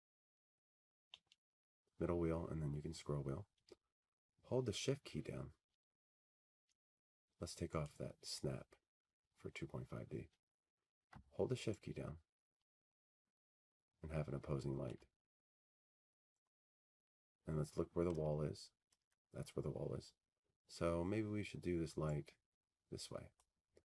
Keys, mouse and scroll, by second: 1.5 click, 2.9 t, 4.4-5.1 scroll, 5.6 scroll, 5.9-6.9 scroll down 11, 6.9-8.0 scroll up 3, 8.0 scroll down 2, 11.3 middle click, 13.6 click, 16.7 click, 20.4 shift+click, 22.0 click, 23.2 middle click, 23.3 middle click, 23.4 middle click.